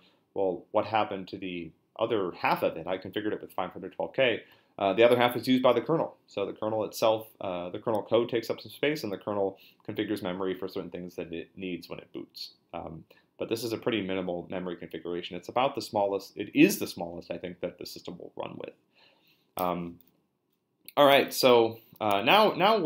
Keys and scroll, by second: 21.1 q, 22.1 BackSpace.